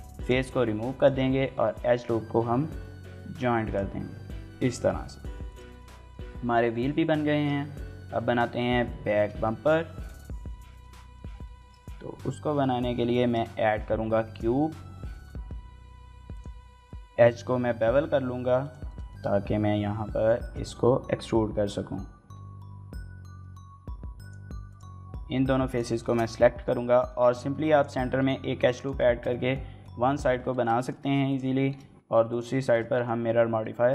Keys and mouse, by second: 0.0-2.3 typing, 0.7 alt+click, 3.4 click, 3.7 Tab, 4.8-5.2 middle drag, 5.5 shift+middle click, 5.7 middle click, 7.2 shift+middle drag, 7.4 middle click, 8.9 shift+middle click, 9.2 middle drag, 9.9 shift+middle drag, 10.5 shift+middle drag, 10.7 middle click, 11.4 shift+middle click, 11.6 middle drag, 12.0-15.4 typing, 12.5 Tab, 13.0 click, 13.4 click, 13.8 click, 14.7 click, 15.0 shift+click, 16.2 middle click, 16.4 middle click, 16.5 ctrl+r, 16.7 ctrl+b, 18.4 click, 18.9-20.1 middle drag, 20.3 shift+middle click, 22.8 y, 24.0 click, 25.3 3, 25.9 shift+middle click, 26.1 middle click, 26.7 shift+middle click, 26.9 middle click, 27.2 ctrl+r, 28.2 ctrl+r, 28.6 right click, 28.8 shift+middle click, 29.0 middle click, 29.2 middle click, 29.6 middle click, 30.3 shift+middle click, 30.5 middle click, 31.0 click, 31.5 shift+middle click, 32.5 shift+middle click, 32.7 middle click, 33.4 middle click, 33.8 e.